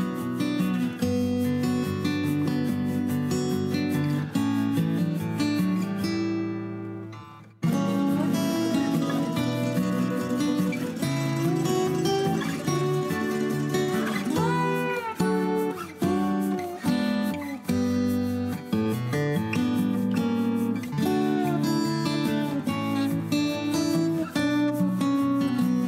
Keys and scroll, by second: 1.9 m, 3.4 p, 6.1 Escape, 6.3 Escape, 11.0 m, 12.6-13.6 typing, 15.4-19.6 typing, 17.3 Escape, 18.4 Escape, 18.5 Escape.